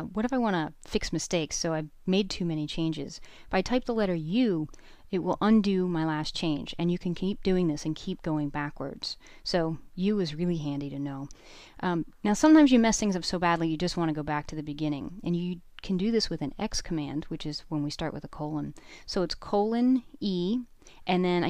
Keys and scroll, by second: 3.1 u, 5.0 u, 7.0 u, 8.4 u, 10.1 typing, 13.9 :, 17.4 e, 20.4 shift+1.